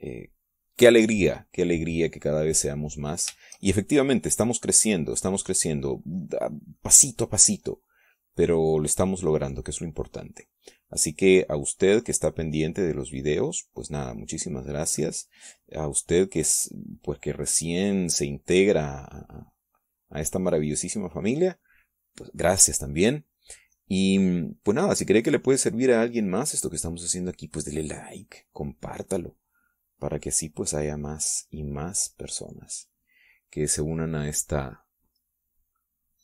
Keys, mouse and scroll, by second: 24.0 middle click, 26.7-34.5 drag, 35.7-36.2 drag.